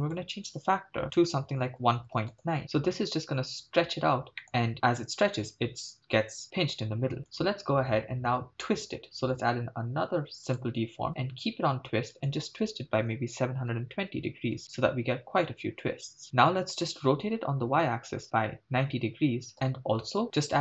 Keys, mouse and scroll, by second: 0.0-2.5 drag, 4.0-4.4 scroll up 2, 4.4-4.7 middle drag, 6.5-7.3 scroll up 1, 7.3-11.1 drag, 11.1 scroll down 3, 12.2-14.6 drag, 17.1 r, 17.6 y, 18.2 9, 18.2 0, 19.5 Return, 20.2-20.6 scroll up 2.